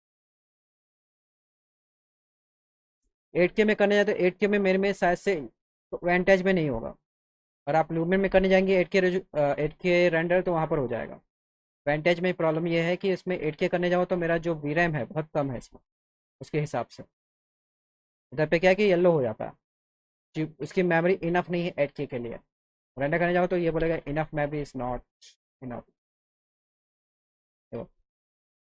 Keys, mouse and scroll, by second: 6.8 click, 9.0 click, 14.7 click, 16.3 click, 22.9 click.